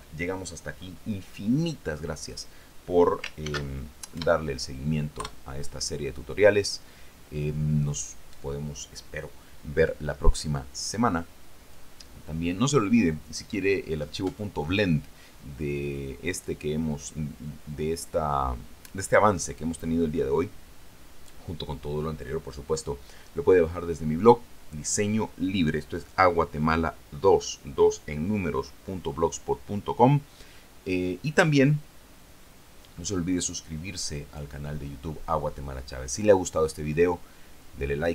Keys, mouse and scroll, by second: 3.6 ctrl+shift+s, 4.3 KP_Add, 5.4 KP_Enter.